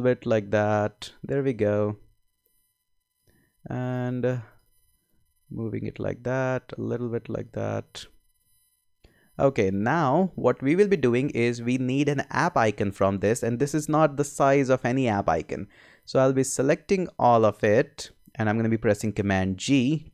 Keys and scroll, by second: 19.6 super+g.